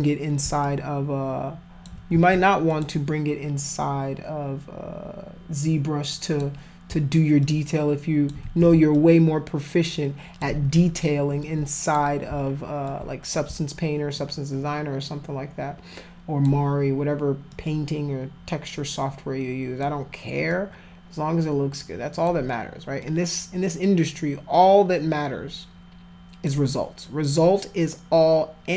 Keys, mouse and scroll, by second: 0.6-1.9 alt+drag, 2.1 ctrl+z, 2.7 click, 6.3 click, 7.4 alt+click, 8.4 ctrl+z, 8.9-10.4 alt+drag, 10.5 ctrl+z, 11.4 alt+click, 12.9 alt+click, 14.1-16.4 alt+drag, 17.5-19.8 alt+drag, 20.5-22.2 alt+drag, 23.0-26.5 alt+drag, 27.4-28.7 alt+drag.